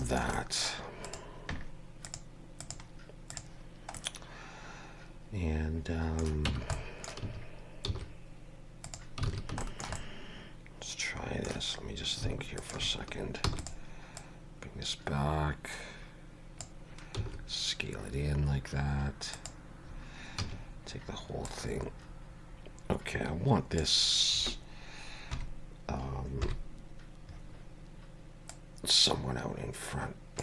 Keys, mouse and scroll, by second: 0.0 shift+middle click, 0.3 middle click, 1.0 click, 2.0 click, 3.9 middle click, 6.5 Tab, 6.7 middle click, 7.2 a, 7.8 s, 9.2 alt+a, 9.6 shift+middle click, 10.0 middle click, 12.6 alt+shift+click, 13.4 e, 14.2 click, 17.1 s, 20.4 a, 21.4 click, 24.1-24.5 scroll down 1, 25.3 KP_3, 26.4 KP_1, 28.5 click.